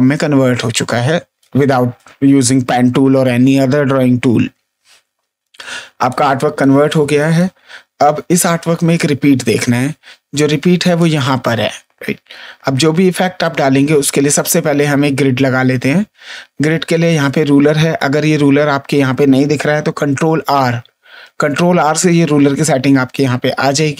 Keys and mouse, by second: 1.3 ctrl+space, 1.9 click, 5.3 space, 6.0 click, 6.8 click, 10.9 click, 14.3 ctrl+d, 20.1 ctrl+r.